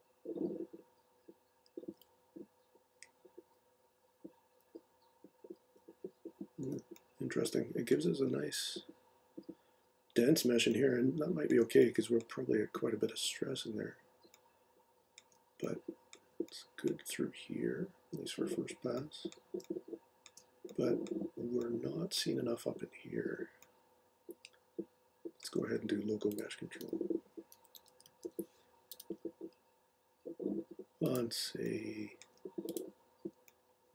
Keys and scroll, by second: 26.8-28.7 typing, 28.9 Return.